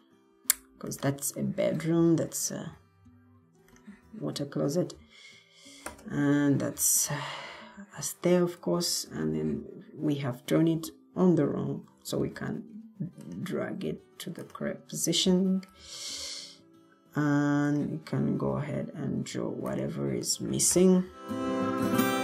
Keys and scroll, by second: 12.1 ctrl+d, 15.9 Escape.